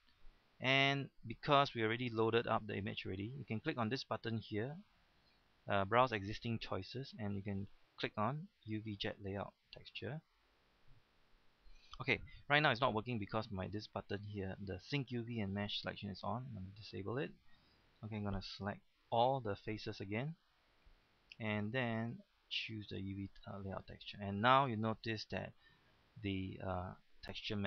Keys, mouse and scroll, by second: 2.0 click, 10.1 click, 11.5 middle click, 16.6 click, 18.7 a, 21.9 click, 24.1-24.5 scroll down 2, 26.2-27.6 middle drag.